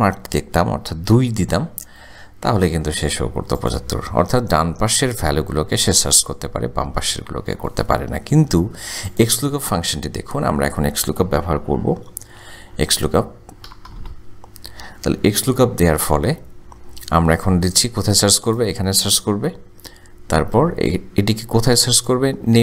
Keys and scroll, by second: 2.5 Return, 10.8 =, 13.9 o, 15.5 Tab, 21.1 ,.